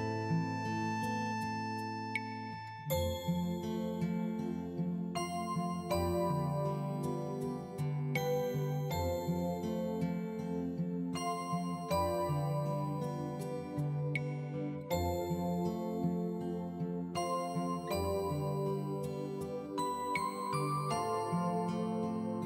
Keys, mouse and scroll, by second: 4.9 click, 11.9 click, 18.2 click.